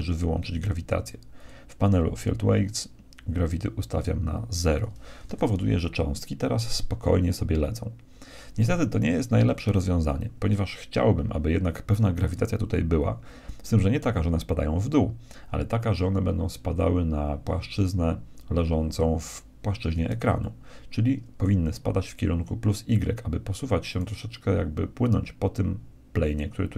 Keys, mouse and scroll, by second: 1.4-3.1 drag, 3.1 middle click, 3.5-5.4 drag, 5.2 alt+a, 20.4-22.2 middle drag, 23.9-25.8 right drag.